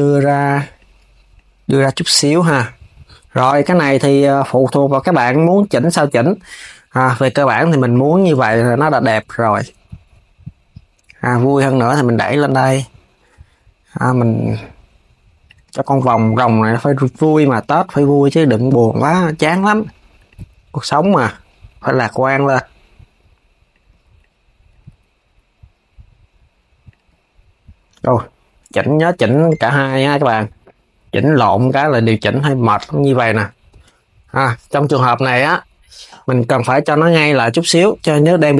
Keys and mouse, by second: 0.4 click, 1.0 click, 4.7 click, 5.8 KP_3, 7.5 shift+click, 7.8 KP_3, 8.4 g, 16.3 click, 17.0 shift+click, 17.3 KP_3, 18.0 g, 19.9 click, 20.6 g, 23.9 click, 24.6 g, 27.6 z, 28.4 shift+click, 28.8 KP_3, 29.4 g, 32.0 click, 33.3 shift+click.